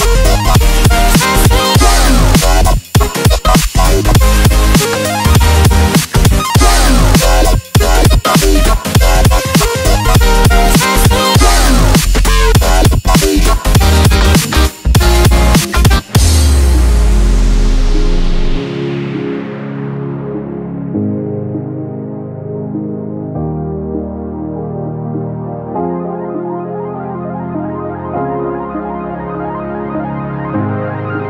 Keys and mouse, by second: 1.7 click, 2.0 ctrl+j, 2.7-6.6 drag, 6.6 ctrl+t, 8.1-13.3 drag, 13.3 Return, 14.0 Delete, 16.3 click, 16.9 ctrl+t, 18.3 Return, 18.8 click, 19.6 ctrl+j, 21.3-23.4 drag, 23.4 ctrl+t, 24.0-30.6 drag, 30.6 Return.